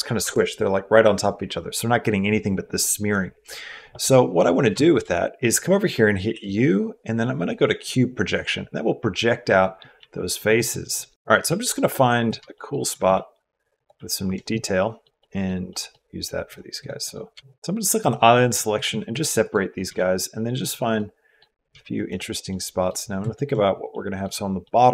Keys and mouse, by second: 4.2 middle click, 4.6 shift+middle click, 6.1 u, 9.8 s, 11.1 g, 11.3 s, 12.5 shift+middle click, 12.9 g, 14.4 middle click, 15.0 middle click, 15.5 middle click, 16.6 click, 16.8 click, 17.1 g, 17.4 g, 17.9 click, 18.7 g, 19.7 g, 20.9 middle click, 21.5 g, 22.3 click, 23.1 shift+click, 23.7 click, 24.4 click.